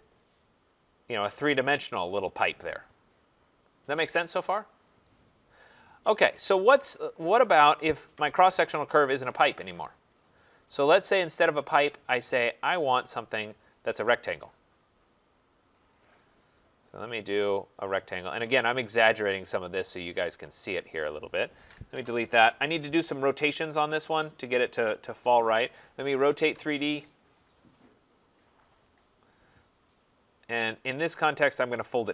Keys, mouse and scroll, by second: 5.0 right click, 5.7 scroll, 5.9 middle click, 6.7 click, 8.0 Delete, 10.1 right click, 11.8 click, 13.1 click, 16.0-16.8 scroll, 16.8 scroll down 4, 19.6 click, 19.9 scroll down 3, 21.0 click, 21.1 scroll, 21.9 Delete, 24.0 click, 25.6 r, 26.4 Return, 28.8 click, 29.0 middle click, 29.2 middle click, 30.0 click, 31.3 click.